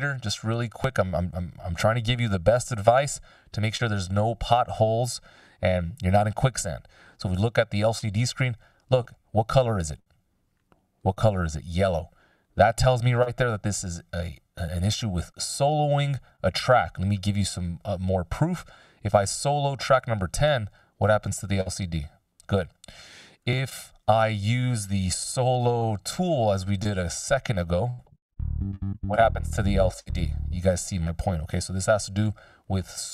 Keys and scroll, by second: 25.4 t.